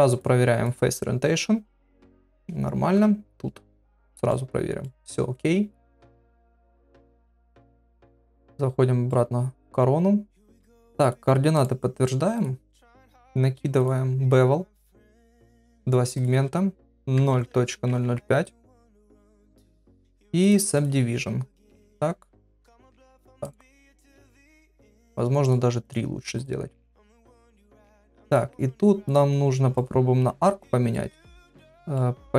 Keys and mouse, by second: 0.6-2.3 drag, 3.0 KP_Divide, 4.3 middle click, 5.8-7.0 drag, 8.2 KP_Divide, 9.1 middle click, 10.7 ctrl+a, 11.6 right click, 13.9 click, 15.6 click, 16.2-18.9 drag, 17.7 KP_0, 19.8 click, 20.4 click, 23.4 right click, 25.4 click, 26.3 click, 27.3 click, 28.3 click, 29.0 click, 30.9 middle click, 31.9-32.3 middle drag.